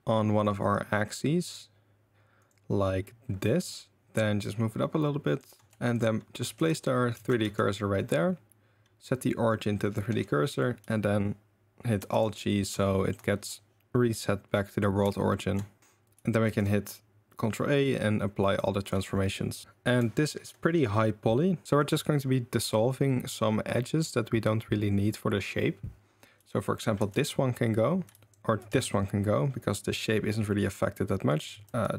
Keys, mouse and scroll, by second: 3.6 r, 4.0-5.5 shift+middle drag, 4.0 shift+g, 5.7 Tab, 5.7 1, 6.6 click, 6.6 2, 7.1 shift+s, 7.4 Tab, 8.0-9.9 drag, 12.0 alt+g, 12.8 shift+middle click, 15.3 shift+middle drag, 15.8 shift+s, 16.4 ctrl+a, 18.8 click, 19.6 Tab, 19.6 KP_7, 19.6 KP_4, 20.2 shift+right click, 27.0 ctrl+x, 28.1 ctrl+z, 28.7 ctrl+x, 31.3 click, 31.6 ctrl+x.